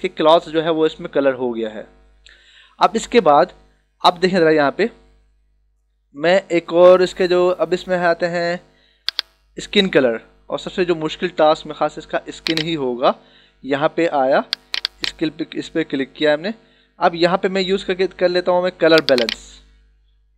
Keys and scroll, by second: 0.2 ctrl+=.